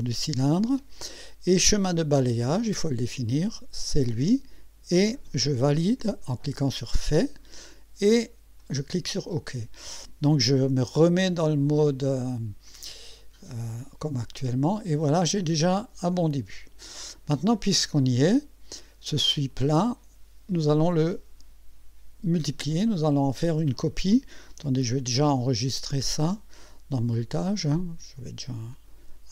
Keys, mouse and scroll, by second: 2.5 click, 3.8 click, 6.7 click, 8.6 click, 12.2 click, 13.2 click, 14.2 click, 15.2-17.0 drag, 19.5 click, 25.0 ctrl+s, 26.0-26.3 scroll down 2, 27.2 click, 28.7 click.